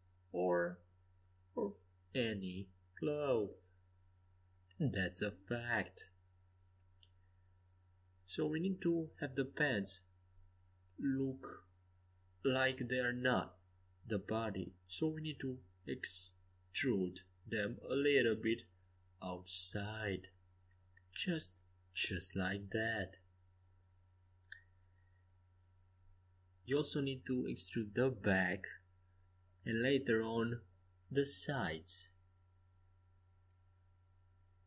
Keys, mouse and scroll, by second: 0.9 KP_5, 3.2 KP_1, 3.9 KP_3, 5.4 KP_5, 6.4 KP_5, 7.1 a, 10.3 c, 14.7-17.4 drag, 15.4 e, 21.4 click, 23.1 c, 25.3 Escape, 25.9 a, 27.6 c, 31.2-33.3 middle drag, 31.8 e, 34.0 middle click.